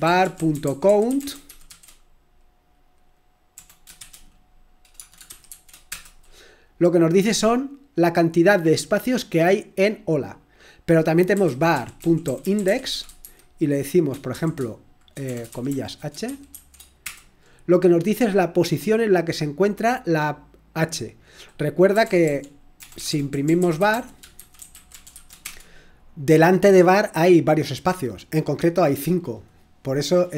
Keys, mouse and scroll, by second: 0.0-2.1 typing, 3.5-5.4 typing, 5.8 Return, 8.3 typing, 11.1-17.0 typing, 21.7-25.6 typing, 28.1 typing.